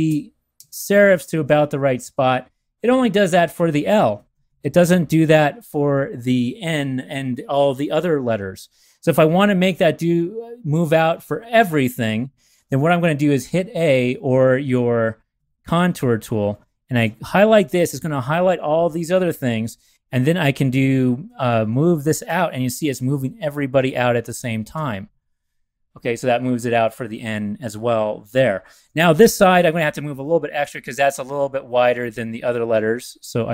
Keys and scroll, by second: 0.5 shift+Left, 4.1 shift+Right, 4.3 shift+Right, 4.4 shift+Right, 16.4 a, 21.2 shift+Left, 21.5 shift+Left, 21.7 shift+Left, 22.2 shift+Left, 23.1 Left, 23.4 Left, 23.8 Left, 24.3 Left, 24.7 Left, 28.8 v, 30.6 shift+Tab, 30.9 shift+Right, 31.1 shift+Right, 31.6 Left, 31.8 Left.